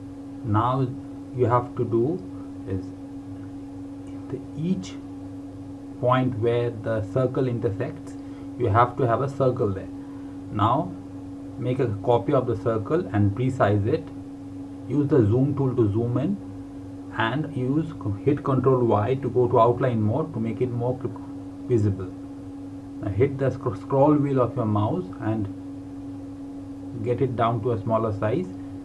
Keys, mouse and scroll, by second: 2.4-3.2 typing, 5.0 click, 8.6 KP_4, 9.0 KP_0, 9.8 KP_Enter, 13.2 click, 16.8 y, 19.1 click.